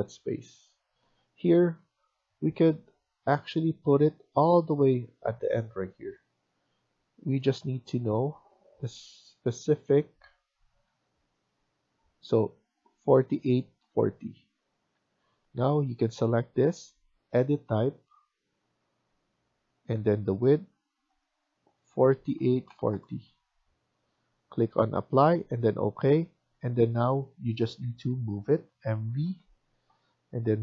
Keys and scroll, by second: 1.7 Escape, 7.5 Tab, 8.0 Tab, 10.3 Tab, 10.9 Tab, 13.9 Escape, 14.9 Escape, 15.1 Escape, 28.9 typing, 30.0 typing.